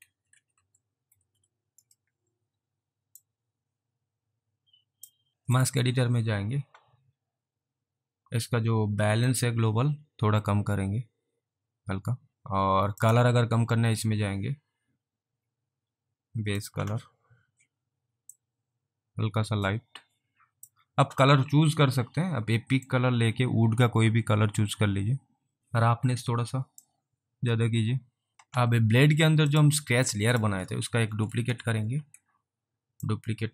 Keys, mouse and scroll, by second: 0.0-1.6 typing, 3.3 click, 5.3 alt+right click, 5.6 click, 9.3 click, 12.3 alt+click, 13.1 click, 16.6 click, 18.3 click, 18.5 click, 22.9 click, 26.9 click, 29.5 click, 31.5 ctrl+d, 33.0 ctrl+d, 33.1 click.